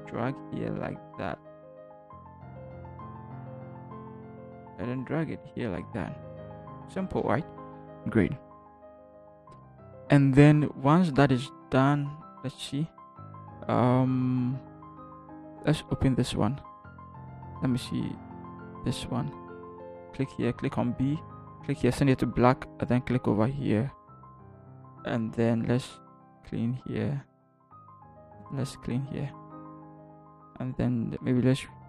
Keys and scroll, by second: 3.4 Return, 4.0 v, 12.4 ctrl+h, 20.5 b.